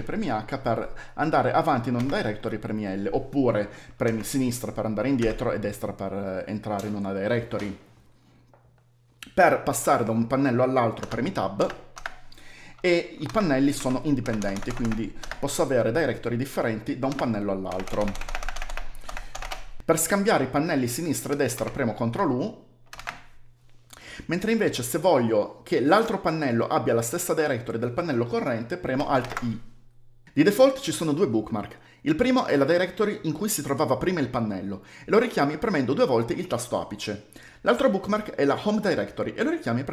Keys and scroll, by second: 1.8 l, 3.9 Left, 5.0 Right, 10.8-11.8 typing, 12.9-15.2 typing, 17.3-19.8 typing, 21.4 ctrl+u, 22.8 ctrl+u, 29.0 alt+i, 36.2 shift+1.